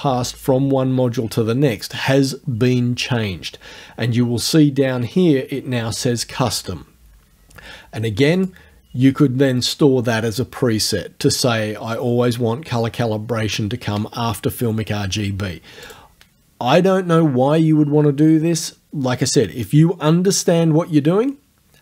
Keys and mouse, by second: 8.4 click, 15.9 click.